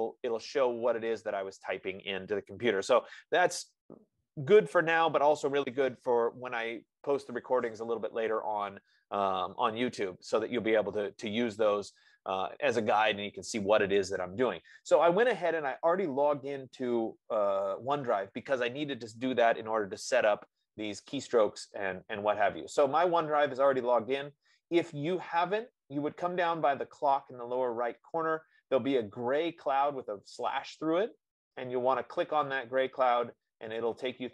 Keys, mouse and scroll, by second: 13.3-18.3 drag, 17.3 F15, 21.7-23.5 drag, 24.0-25.0 drag, 25.1 click, 25.4-26.6 drag.